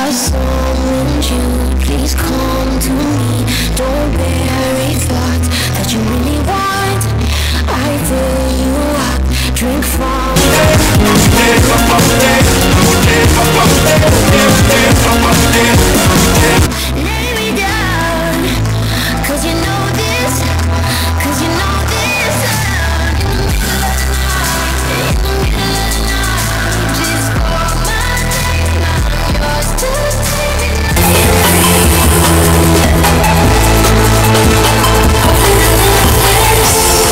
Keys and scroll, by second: 16.8 Page_Down.